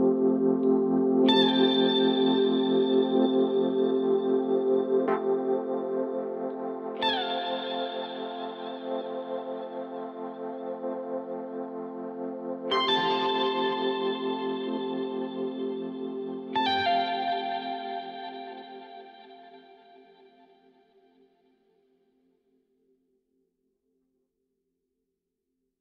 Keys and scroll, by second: 2.0 4, 16.7 1, 18.1 /.